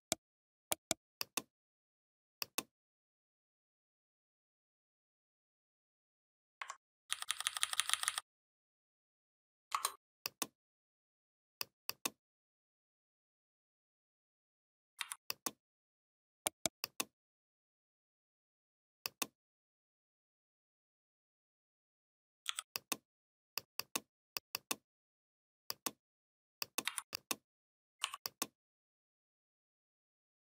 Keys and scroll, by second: 6.9 ctrl+[, 14.8 v, 22.3 i, 26.7 v.